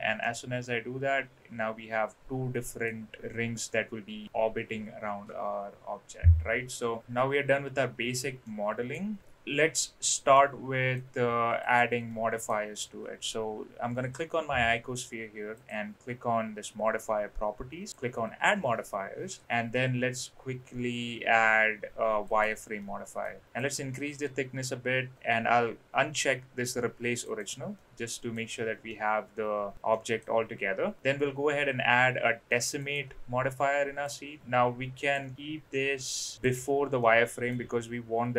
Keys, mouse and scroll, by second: 0.2-2.8 middle drag, 8.4-8.9 middle drag, 10.4-10.9 middle drag, 11.6 click, 12.0-12.4 middle drag, 15.5 click, 17.9-22.4 drag, 22.8-23.2 middle drag, 23.7-25.2 drag, 27.2 click, 27.7-28.3 middle drag, 28.9-29.7 middle drag, 29.9 middle drag, 31.0-32.9 drag, 34.1-35.1 drag, 36.3 click, 37.0-37.5 middle drag.